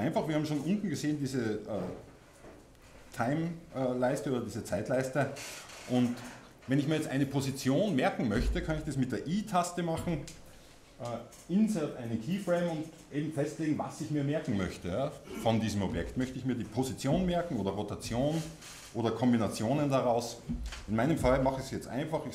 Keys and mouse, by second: 9.3-22.3 middle drag.